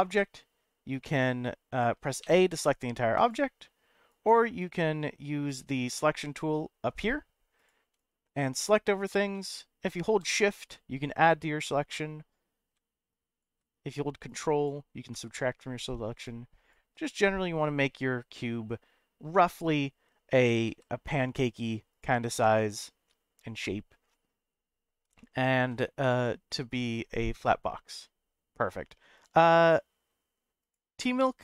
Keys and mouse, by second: 1.7 click, 2.2 a, 3.2 click, 4.1 click, 4.6 click, 7.6-8.6 drag, 9.3 middle click, 10.7 shift+click, 11.6-12.7 middle drag, 13.2 shift+click, 14.2 ctrl+click, 15.1 middle click, 16.2 shift+click, 17.0-19.1 middle drag, 20.4 s, 20.6 z, 21.9 click, 22.4-24.3 middle drag, 25.2 shift+middle click, 25.8 middle click.